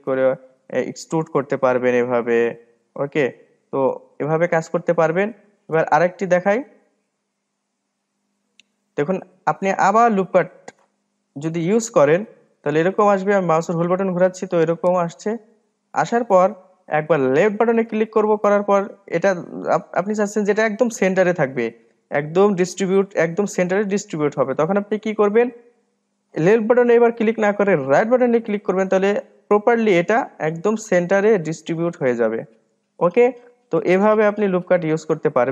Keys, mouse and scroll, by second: 2.9 e, 5.2-5.8 scroll up 1, 6.7 ctrl+z, 7.0 ctrl+z, 7.4 ctrl+z, 7.8 ctrl+z, 8.0 ctrl+z, 9.0 ctrl+z, 10.3-12.6 middle drag, 12.6 ctrl+r, 30.3-35.2 middle drag, 35.2 click.